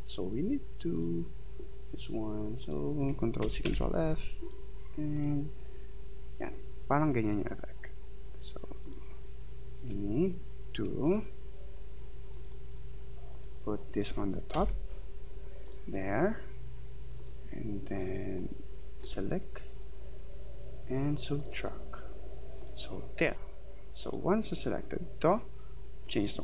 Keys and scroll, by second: 3.4 ctrl+c, 3.7 ctrl+f, 14.5 ctrl+].